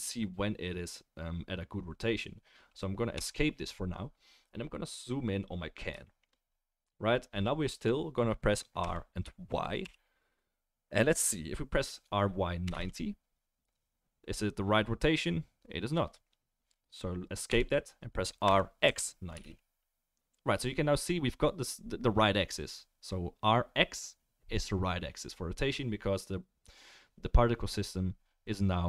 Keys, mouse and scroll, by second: 8.8 r, 18.4 r.